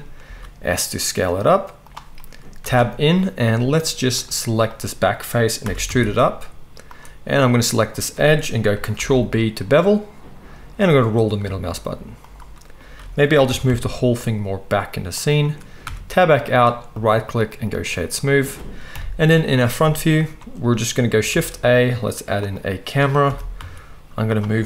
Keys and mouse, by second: 0.2 s, 1.9-4.2 middle drag, 2.6 Tab, 4.2 click, 5.6 e, 7.8-8.7 drag, 8.9 ctrl+b, 13.0 a, 13.4 g, 15.8 Tab, 16.1-17.0 middle drag, 17.0-24.3 drag, 18.9 KP_1, 21.3 shift+a, 23.3 g, 24.3-24.6 right drag.